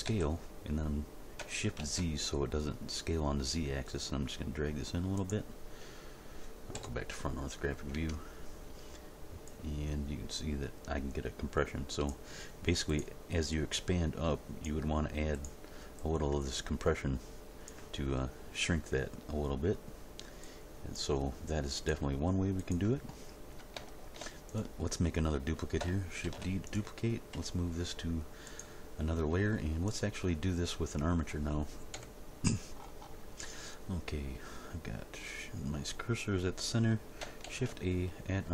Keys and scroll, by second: 0.0 s, 1.8 shift+z, 6.7 End, 7.9 Tab, 26.3 shift+d, 27.3 m, 31.9 End, 37.5 shift+a.